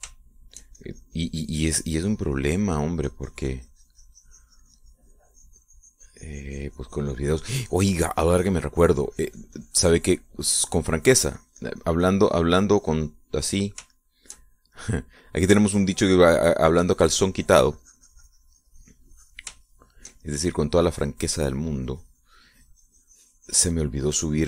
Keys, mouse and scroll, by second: 1.3 shift+middle click, 2.0-3.6 shift+drag, 3.6 middle click, 4.2-14.6 drag, 15.1 shift+middle click, 16.4 click, 17.3-20.7 shift+drag, 20.8-22.8 shift+middle drag, 22.8-24.4 drag.